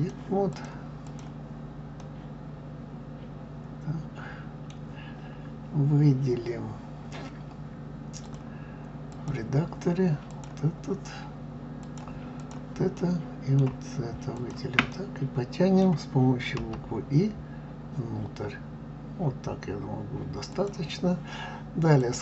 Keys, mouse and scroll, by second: 1.0 click, 2.0-5.0 middle drag, 8.2-10.4 drag, 11.8 click, 13.0-14.3 middle drag, 14.3 shift+click, 14.9-16.6 middle drag, 22.0-22.2 drag.